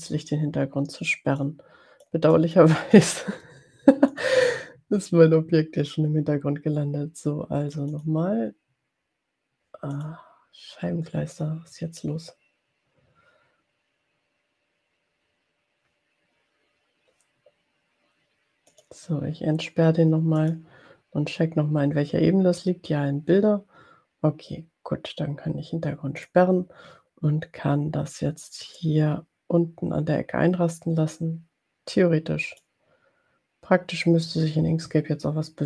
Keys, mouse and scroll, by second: 1.4 click, 2.3 click, 4.0 click, 8.0 click, 10.1 click, 18.7 click, 20.6 click, 26.1 click, 28.9-32.9 drag.